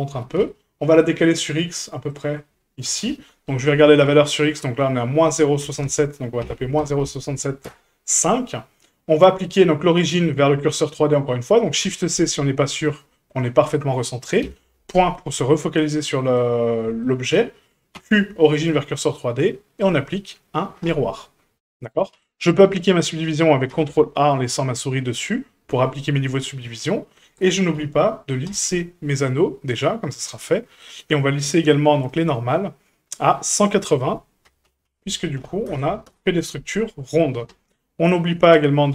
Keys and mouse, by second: 0.1 g, 2.9 KP_1, 4.5-8.4 drag, 9.8 shift+middle drag, 11.8 shift+c, 13.3 middle click, 14.4 KP_Decimal, 16.2 shift+middle drag, 17.0-17.4 shift+middle drag, 17.9 q, 20.0-20.9 drag, 23.7 ctrl+a, 26.6-27.1 middle drag, 27.7 w, 30.3-30.7 drag, 33.6-36.7 drag, 38.0 drag.